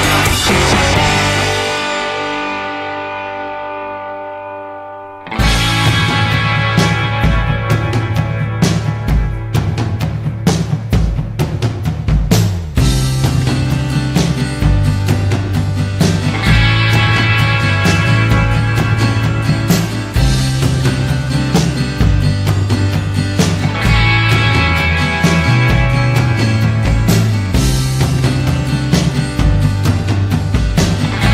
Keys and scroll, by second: 25.2 r.